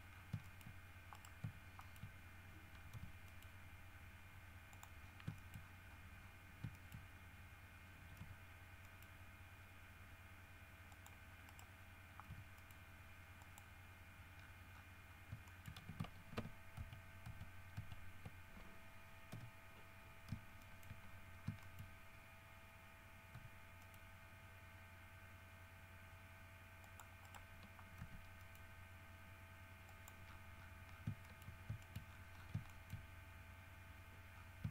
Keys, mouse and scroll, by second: 0.3 scroll down 1, 0.6 shift+middle click, 1.3 shift+right click, 2.0 shift+middle click, 3.1 g, 3.4 middle click, 4.9 click, 5.2-6.6 scroll up 4, 5.5 shift+middle click, 6.9 shift+middle click, 7.3 shift+scroll up 2, 8.4 g, 9.0 middle click, 11.1 click, 11.6 right click, 12.4 g, 12.7 middle click, 13.6 middle click, 14.0-15.6 scroll down 5, 15.6 shift+middle click, 17.0 ctrl+z, 19.5 l, 20.0 scroll up 2, 20.8 shift+middle click, 21.2-22.2 shift+scroll up 2, 21.8 shift+middle click, 23.5 g, 24.0 middle click, 27.0 click, 28.2 g, 28.6 middle click, 30.0 click, 30.4-31.3 scroll down 7, 31.4 shift+middle click, 32.0 shift+middle click, 32.2-32.8 shift+scroll up 2, 32.8 shift+middle click, 34.5-34.7 scroll down 1.